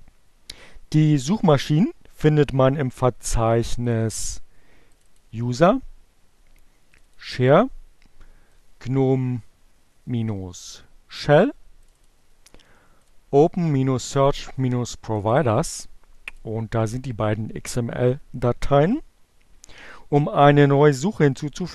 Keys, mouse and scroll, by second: 4.0 click, 4.9 click, 6.9 click, 8.6-10.8 drag, 11.2 click, 12.4 click, 12.9-14.8 drag, 15.2 click.